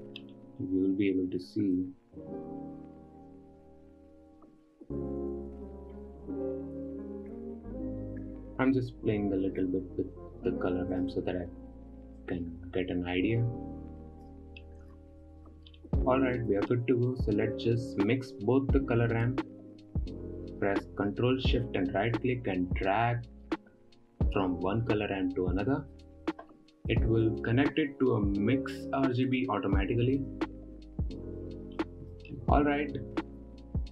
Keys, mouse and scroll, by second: 0.7-1.2 scroll up 3, 2.2 click, 3.8-6.1 drag, 6.4-8.4 drag, 8.7-9.4 drag, 10.1-11.7 drag, 12.3-14.4 drag, 14.4 scroll down 6, 14.7-15.3 middle drag, 15.3-15.7 scroll down 4, 15.7-16.2 middle drag, 16.2-17.6 scroll up 6, 16.7 middle click, 17.6-19.7 drag, 19.7-26.5 ctrl+shift+right drag, 27.3 scroll up 1, 27.4 middle click, 28.0-29.2 scroll down 1, 29.2-29.7 scroll down 1, 29.7 click, 30.7-31.4 scroll up 3, 32.3-33.6 middle drag, 33.6-33.9 scroll up 2.